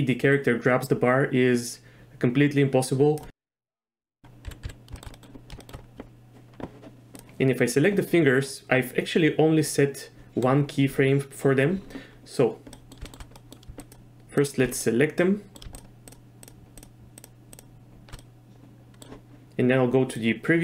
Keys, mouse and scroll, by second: 3.8 z, 4.4 z, 4.6 z, 5.0 shift+drag, 5.6 shift+click, 7.1 click, 9.6 click, 9.6 right click, 12.7 middle click, 13.4 middle click, 13.9 shift+click, 14.4 shift+click, 14.8-15.5 middle drag, 15.7 shift+drag, 16.4 shift+click, 17.2 shift+click, 18.2-19.0 middle drag, 20.2 click.